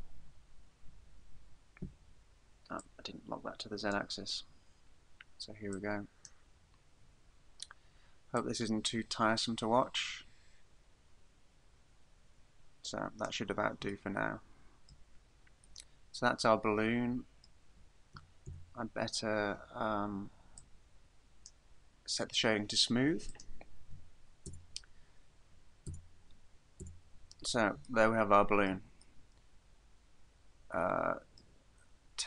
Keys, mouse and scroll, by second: 2.8 click, 4.4-4.9 scroll down 4, 5.8 click, 6.6-7.7 scroll down 8, 8.4 click, 14.1 shift+middle click, 15.9 middle click, 18.2 a, 18.5 a, 20.6 click, 23.3 click, 24.5 Tab, 25.9 Tab, 26.9 Tab, 27.3-28.0 scroll down 3, 28.0 shift+middle click, 29.2 middle click.